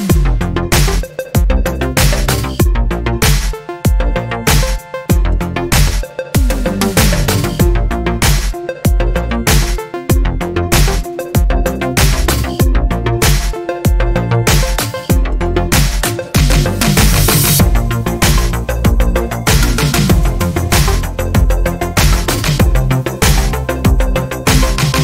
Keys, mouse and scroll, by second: 1.0-1.9 ctrl+scroll up 6, 3.9 click, 5.4 click, 6.4 click, 7.2 click, 9.4-11.3 drag, 12.0 click, 14.4 click, 16.1-17.5 drag, 18.0 click, 22.5 click, 23.4 click, 24.5 ctrl+shift+click.